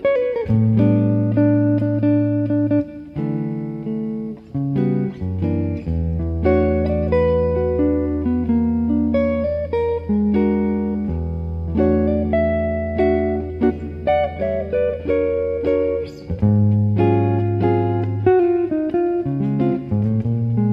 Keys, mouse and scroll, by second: 0.1-2.2 right drag, 1.8 u, 4.0-6.1 middle drag, 4.9 alt+z, 7.3 middle click, 7.7-10.7 drag, 11.5-15.7 middle drag, 12.4 right click, 13.1-14.9 drag, 13.1 right click, 15.8 middle click, 16.7-18.6 right drag, 17.7 click, 17.9-19.7 middle drag, 19.2 right click, 19.7 right click.